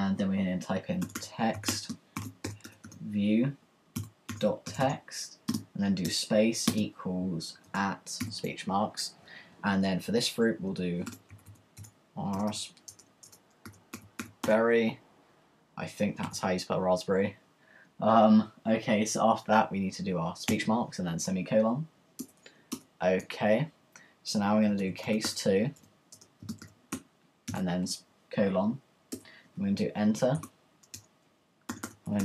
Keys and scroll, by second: 0.8-8.4 typing, 10.8-15.1 typing, 16.2 typing, 20.6 ;, 22.2 Return, 24.5-29.0 typing, 29.1 Return, 31.5-32.2 typing.